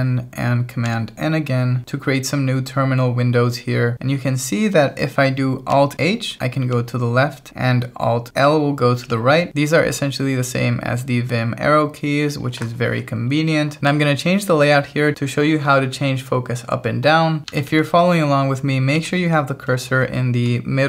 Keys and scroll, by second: 5.9 alt+h, 8.4 alt+l, 17.4 alt+l, 17.5 alt+h, 19.0 alt+l.